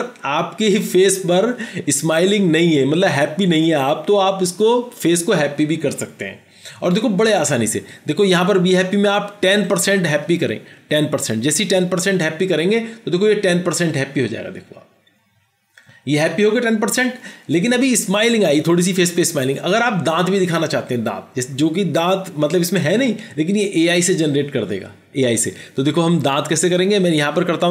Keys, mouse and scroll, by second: 11.0 typing, 11.8 Return.